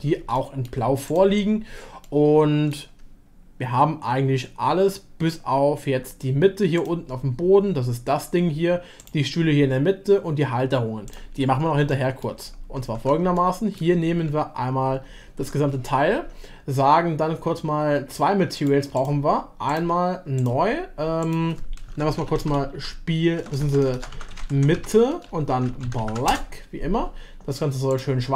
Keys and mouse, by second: 0.3-0.7 shift+middle drag, 2.0-7.0 shift+middle drag, 9.0 click, 11.9 shift+middle click, 12.9 Tab, 13.3 shift+middle click, 15.4 Tab, 16.0 a, 18.6 click, 19.6 click, 20.4-27.0 drag, 23.5 BackSpace, 23.6 BackSpace, 24.5 BackSpace, 25.4 t, 27.9 click.